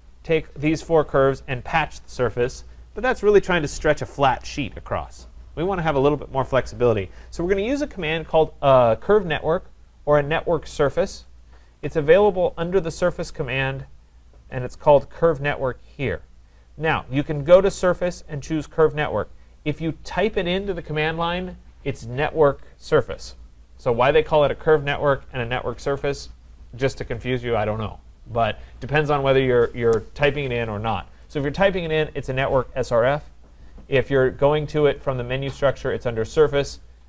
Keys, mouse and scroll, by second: 0.1-6.5 drag, 7.3-12.4 drag, 12.8 click, 18.8 click.